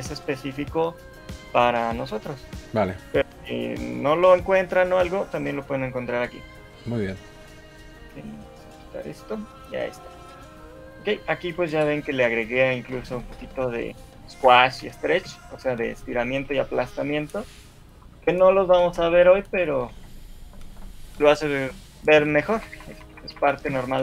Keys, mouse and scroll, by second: 10.6 middle click, 11.2-12.1 shift+scroll up 2, 12.1 shift+middle click, 12.1 scroll up 1, 12.2 middle click, 13.4 KP_1, 14.2 scroll up 2, 14.5 Escape, 15.0 shift+middle click, 16.0 Left, 16.1 Left, 16.6 Left, 16.9 Left, 17.5 Left, 18.0 Left, 19.2 Right, 19.4 Right, 19.9 Right, 20.3-21.1 Right, 22.6 Right, 22.8 Right, 23.0 Right, 23.2 Right, 23.4 Right, 23.8 Right.